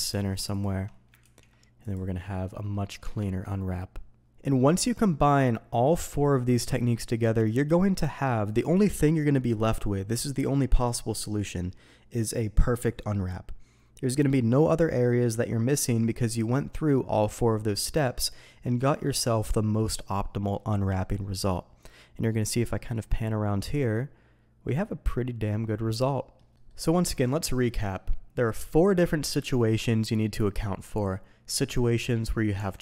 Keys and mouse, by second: 1.2 ctrl+e, 2.2-2.7 middle drag, 3.0 Tab, 4.2 alt+a, 21.0-22.6 middle drag, 22.9-24.6 middle drag, 25.0-26.3 middle drag, 26.5 middle click, 27.0 Tab, 27.6 middle click, 31.5 middle click, 32.1 middle click, 32.5 Tab.